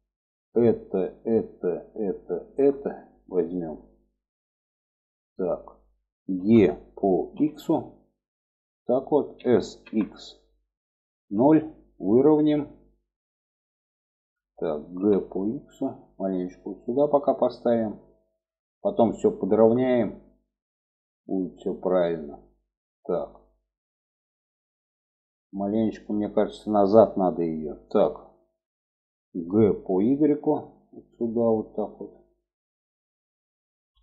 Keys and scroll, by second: 5.7 e, 8.7 s, 14.2 g, 28.6 g.